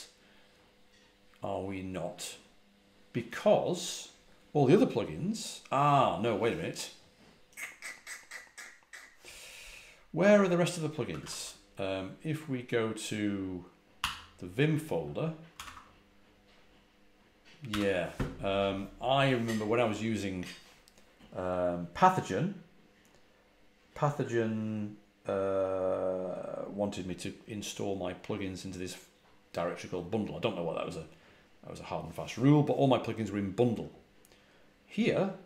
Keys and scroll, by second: 11.0 ctrl+a, 11.1 ctrl+l, 13.9 v, 15.5 r, 15.6 Return, 17.6 j.